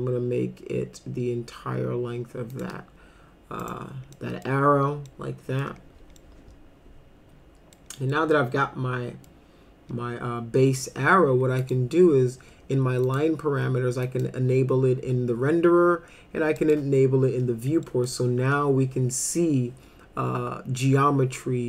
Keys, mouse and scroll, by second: 2.5 shift+click, 3.6 right click, 4.2 middle click, 5.1 middle click, 6.2-7.8 middle drag, 8.1-9.3 middle drag, 10.6 middle click, 11.6 click, 13.1 click, 14.0 click, 16.6 click, 17.8 middle click.